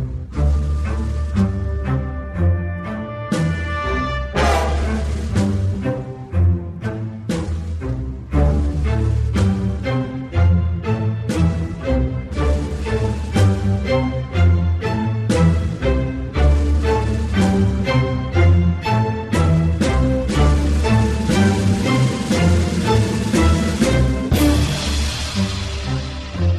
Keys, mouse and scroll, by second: 0.5 f, 0.6-1.6 drag, 1.6 f, 1.8 f, 1.9-3.8 drag, 3.9 alt+middle click, 4.1-5.4 alt+drag, 5.4 alt+right click, 5.7 click, 6.0 alt+middle click, 6.2 click, 6.4 alt+middle click, 6.9 alt+click, 7.1 alt+middle click, 7.2 alt+click, 8.1-12.5 typing, 8.2 alt+click, 8.7 alt+middle click, 9.1 alt+click, 9.3 alt+right click, 9.4 alt+middle click, 9.6 alt+right click, 9.7 alt+click, 10.1 click, 10.4 click, 10.6 click, 10.9 click, 11.4 click, 11.7 click, 12.8-14.0 drag, 14.0 f, 14.2 click, 14.8 p, 15.0 click, 15.4 g, 15.6 click, 16.3 p, 16.5 alt+middle click, 16.6-18.0 alt+drag, 18.0 alt+middle click, 18.2 alt+click, 18.5 g, 19.1 alt+click, 20.0-23.1 typing, 20.1 click, 20.5 alt+middle click, 20.6 click, 21.4 click, 22.1 click, 22.4 click, 22.7 alt+right click, 23.2-24.3 drag, 24.3 alt+middle click, 24.5 alt+click, 24.9 alt+middle click, 25.8 shift+c.